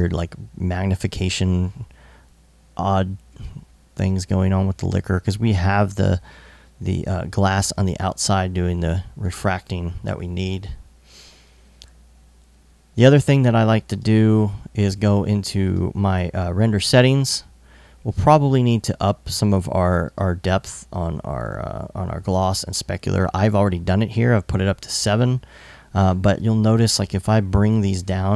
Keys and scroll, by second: 2.9 i.